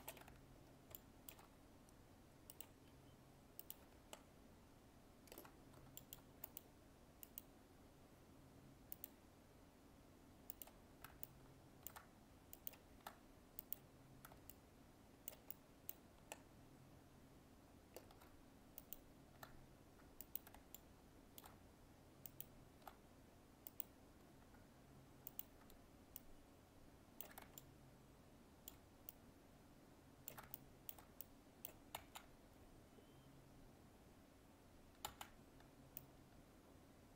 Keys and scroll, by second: 32.0 ctrl+z, 35.0 ctrl+z.